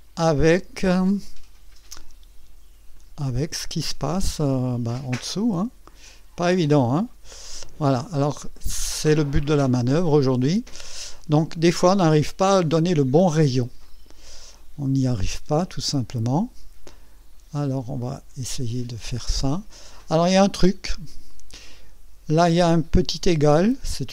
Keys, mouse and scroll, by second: 1.1-2.0 drag, 2.9 click, 5.0-5.9 drag, 6.8 click, 8.5 click, 9.3-9.6 scroll up 1, 9.8-10.5 right drag, 10.7 scroll down 1, 10.8-11.2 scroll up 1, 11.5-12.2 right drag, 13.8-14.4 right drag, 15.8-18.8 drag, 18.9 scroll down 1, 19.5 right click, 21.0 scroll up 1, 22.8 scroll up 1.